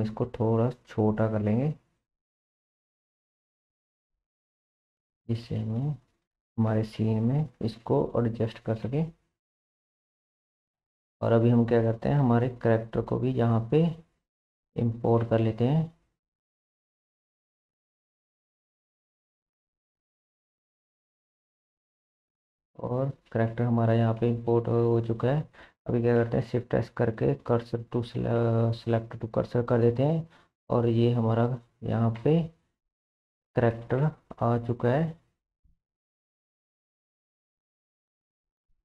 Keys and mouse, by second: 0.3 s, 2.3 middle click, 2.9 shift+middle click, 3.3 g, 5.3 g, 6.7 s, 8.0 g, 10.0-10.6 shift+middle drag, 12.9 Tab, 12.9-17.3 middle drag, 14.4 2, 15.3 shift+s, 16.1 Tab, 24.2-25.3 drag, 25.3-30.2 middle drag, 26.3 shift+s, 30.2-32.2 drag, 30.2-32.2 right drag, 30.2 s, 32.2 KP_1, 34.8 g, 38.6-38.8 drag.